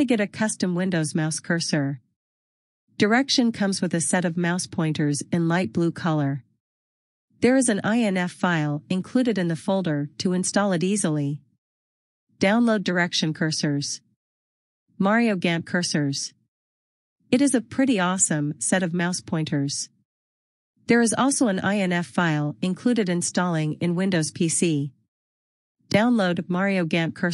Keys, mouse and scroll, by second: 4.1 click, 9.9 click, 17.3 click.